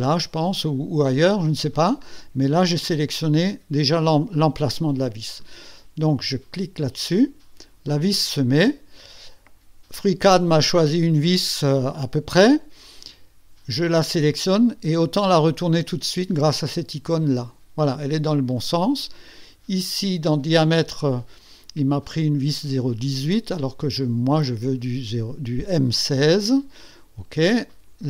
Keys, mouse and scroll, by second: 7.0 click, 14.3 click, 17.0 click, 22.0 click, 22.7 click, 25.8 click, 27.7 click.